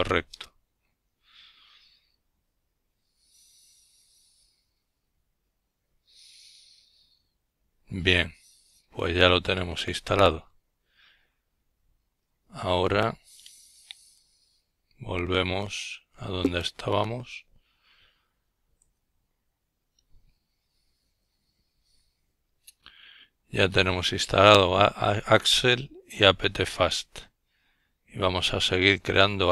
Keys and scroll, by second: 10.3 F12, 14.9 F12.